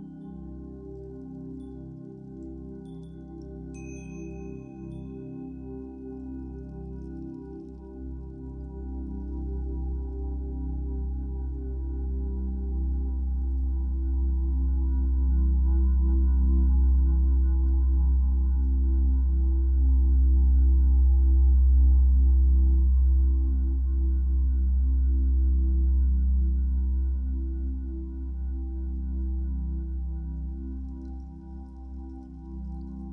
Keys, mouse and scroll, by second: 1.0 f, 1.9-9.1 shift+drag, 7.8-9.0 scroll down 2, 9.9-11.4 middle drag, 10.4-11.4 scroll up 2, 11.4-18.3 drag, 18.0 scroll down 2, 18.3-20.6 shift+middle drag, 18.7 scroll up 2, 20.6-33.1 drag, 26.9-27.7 scroll up 1, 29.4 ctrl+z.